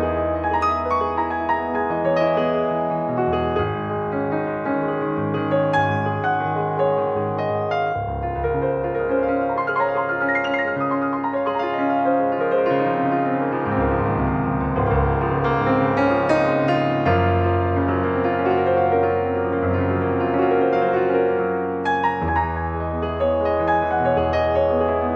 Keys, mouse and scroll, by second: 1.7 click, 6.8-8.6 middle drag, 8.6 click, 12.1 ctrl+3, 12.3 click, 12.8 middle click, 13.4-13.8 scroll up 1, 14.5-15.5 middle drag, 15.5 ctrl+1, 18.9-20.0 drag, 20.2-20.7 scroll up 1, 20.7 middle click, 21.2-21.6 scroll down 2, 21.6-22.8 middle drag, 22.8 click, 23.2-24.5 scroll down 1.